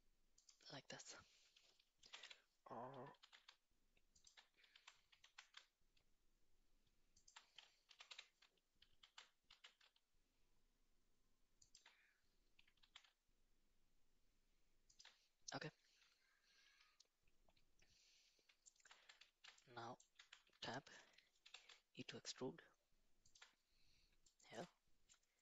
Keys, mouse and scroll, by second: 2.0 g, 4.7 Tab, 5.2 s, 7.9 g, 12.8 s, 18.7 shift+middle click, 19.3 shift+z, 19.7 middle click, 20.2 Tab, 20.5 a, 21.4 e, 24.3 shift+middle click.